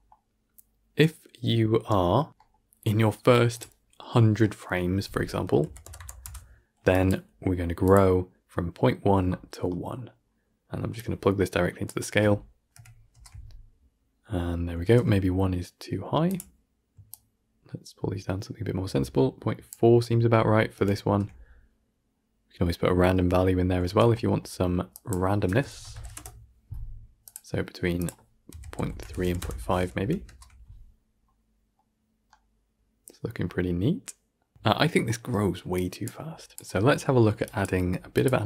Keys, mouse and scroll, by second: 6.1 KP_0, 6.6 click, 10.8-11.7 drag, 12.6 shift+Left, 13.0 shift+space, 14.7 shift+space, 16.2-20.6 drag, 20.6 shift+Left, 20.9 shift+space, 23.7 shift+space, 24.8 drag, 28.8-29.9 drag, 29.9 shift+Left, 30.1 shift+space, 31.1-31.7 scroll down 2, 31.7-33.9 middle drag, 33.9 scroll down 1, 34.2-34.5 middle drag, 34.5 shift+space, 35.6 click.